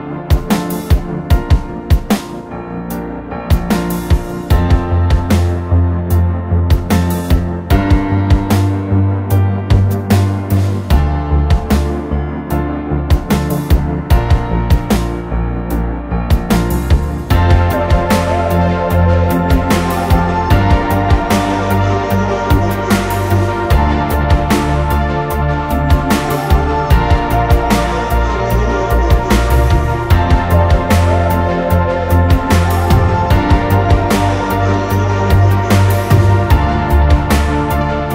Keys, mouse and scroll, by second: 4.4 typing, 19.3-21.0 typing, 26.4-26.9 typing, 34.0 typing.